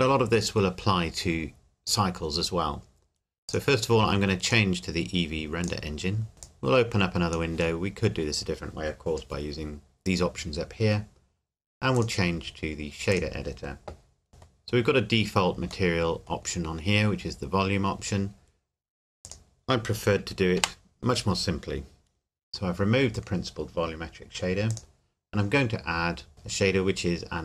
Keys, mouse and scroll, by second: 3.5 click, 6.5 click, 11.9 click, 14.3 middle click, 14.7-15.1 scroll up 1, 15.9 middle click, 19.2 click, 20.6 Delete, 24.7 click.